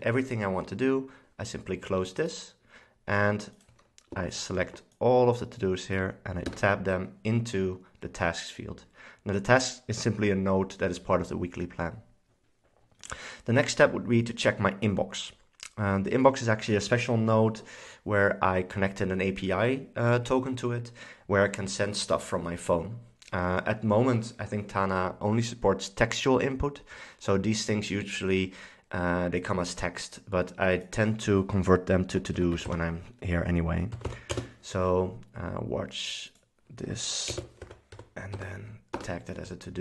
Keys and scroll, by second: 6.6 Tab, 32.2-34.7 typing, 37.4-38.9 typing, 39.0 Return.